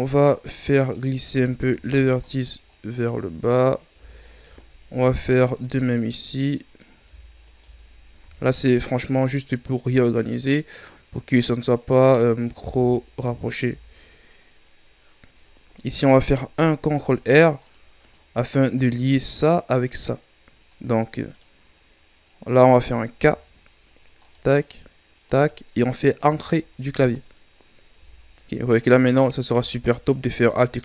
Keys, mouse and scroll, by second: 0.8 alt+right click, 1.7 ctrl+e, 4.2 alt+right click, 5.0 ctrl+e, 7.5 alt+right click, 8.2 ctrl+e, 12.8 Tab, 13.6 Tab, 15.1-15.5 scroll down 1, 15.5-16.1 ctrl+scroll up 5, 16.8 ctrl+r, 18.4-18.8 shift+scroll down 4, 18.8-21.3 scroll up 5, 21.3-23.2 right drag, 23.2 k, 27.0-27.9 scroll down 4, 27.9 a, 28.3-28.7 scroll down 4, 28.7-29.7 scroll up 6, 29.7-30.8 alt+right drag.